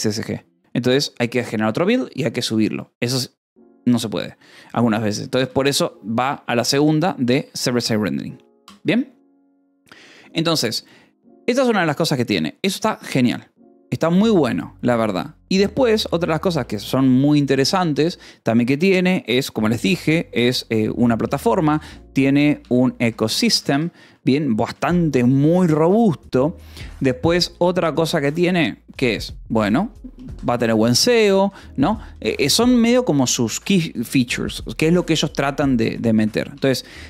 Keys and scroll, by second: 5.8 shift+v, 7.2 Escape, 8.6 j, 16.2 shift+;, 16.5 space, 20.3-24.7 typing, 28.8 space, 30.4 Escape, 32.2 :, 33.1 space, 35.7 BackSpace.